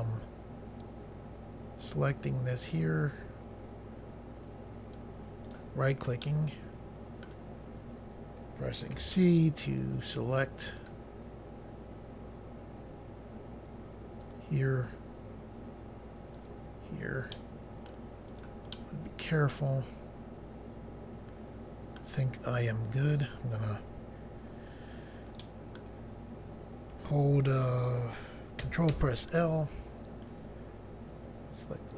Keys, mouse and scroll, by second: 0.8 click, 5.4 right click, 6.2 middle click, 8.9 c, 9.7 click, 14.2 click, 16.3 click, 17.3 middle click, 18.2 right click, 18.7 middle click, 25.4 middle click, 29.0 ctrl+l.